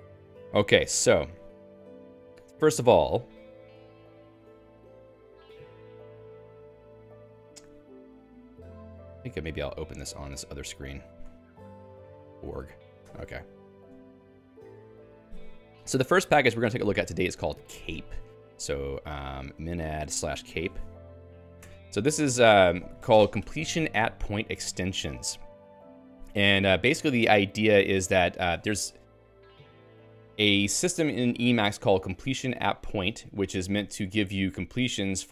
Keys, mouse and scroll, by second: 6.2 Escape.